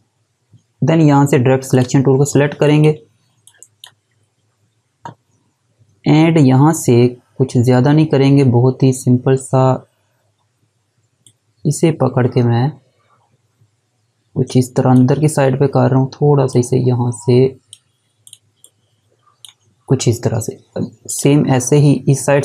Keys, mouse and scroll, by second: 1.7 click, 11.2 click.